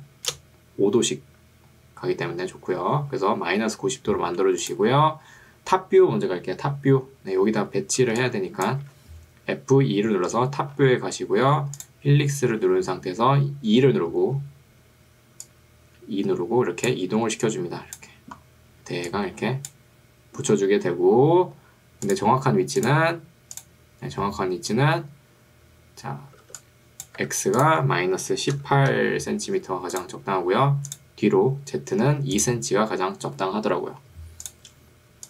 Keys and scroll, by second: 8.2 2, 9.0 Escape, 10.2 F2, 12.6 e, 26.6 2, 27.2 Escape, 28.8 1, 29.0 8, 32.2 2.